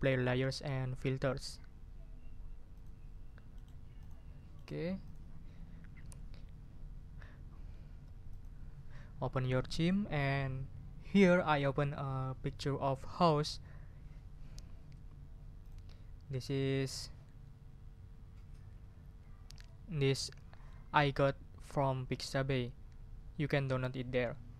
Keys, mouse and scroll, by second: 2.7 click, 3.5 right click, 3.9 click, 4.5 right click, 5.0 click, 8.3 click, 15.6 click.